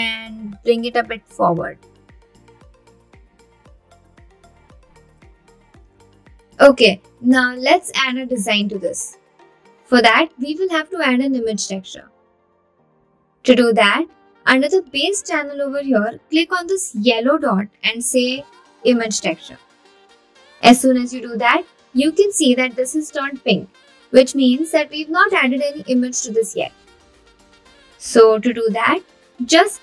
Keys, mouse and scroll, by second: 0.0 click, 1.2-2.6 middle drag, 3.4 shift+middle click, 4.3 click, 4.8 click, 5.7 middle click, 5.8 click, 8.2 Tab, 12.6-14.7 scroll down 2, 15.8-20.0 drag, 25.4-29.0 scroll down 6, 29.3 click.